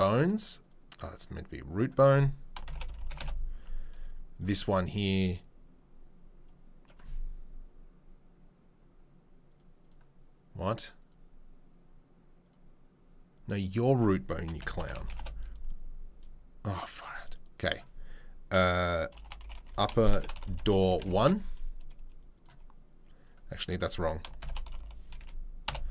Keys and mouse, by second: 0.6-2.5 drag, 2.5 shift+right click, 2.7-4.7 drag, 4.7-9.5 middle drag, 9.5-11.1 drag, 11.1-12.4 middle drag, 12.4 click, 12.5-13.7 middle drag, 13.7-17.0 drag, 17.0 middle click, 17.6-22.4 drag, 19.5 p, 22.4-23.6 middle drag, 23.6 click, 24.2 shift+right click, 24.5-25.9 drag.